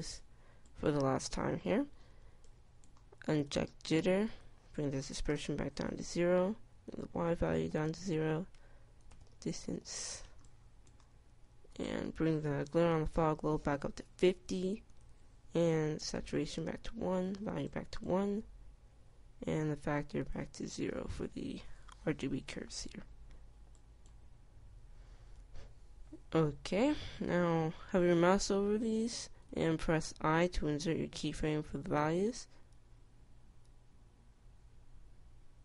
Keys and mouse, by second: 0.4 Tab, 4.8-33.2 drag, 33.2 i, 34.0 i, 35.0 i.